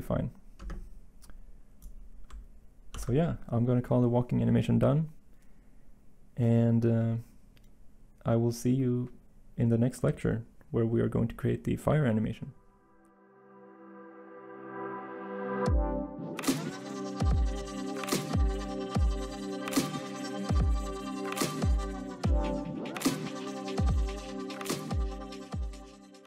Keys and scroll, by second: 2.9 ctrl+s.